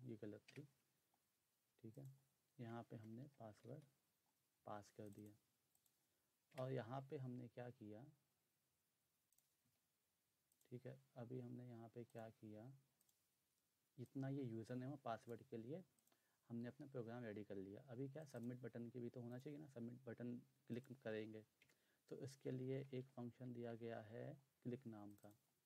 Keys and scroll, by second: 0.5 BackSpace, 2.7-4.1 typing, 6.4 Return, 9.4-10.1 typing, 12.5 s, 21.6 Return, 22.2-24.2 typing.